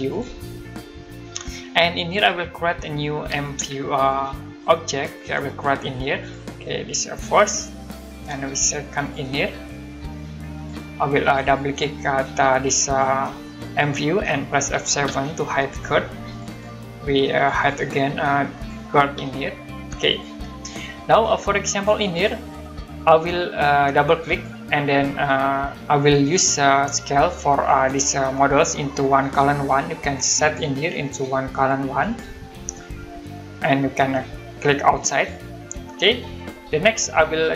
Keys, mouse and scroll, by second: 0.9 Delete, 3.3 typing, 4.9 space, 6.2 click, 7.8 click, 8.3 space, 9.0 click, 10.6 click, 15.0 F7, 15.7 click, 19.1 F7, 19.8 click, 21.7 click, 23.1-23.7 scroll down 1, 23.7-24.1 scroll up 1, 24.1 click, 25.4 middle click, 26.8-27.2 scroll down 1, 27.2 middle click, 30.4 click, 32.0 click, 34.9 click, 36.5 scroll up 1, 37.1 middle click.